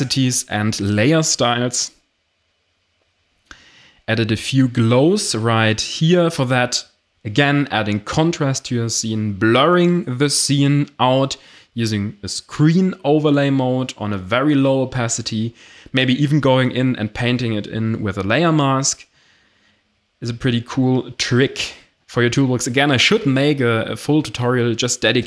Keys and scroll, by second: 4.4 ctrl+alt+shift+e, 5.2 ctrl+i, 18.8 Delete.